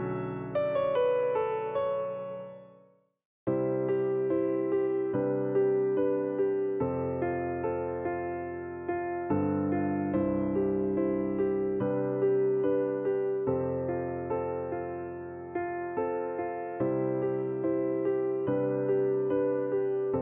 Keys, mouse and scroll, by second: 0.3 click, 1.4-2.3 scroll down 1, 2.3 click, 3.3 click, 4.3 click, 7.1 click, 8.2 alt+click, 9.3 e, 10.4 click, 12.1-13.5 scroll up 3, 13.5 click, 13.9 click, 14.3 shift+scroll up 1, 14.3-18.0 shift+middle drag, 18.6 click, 19.1 click.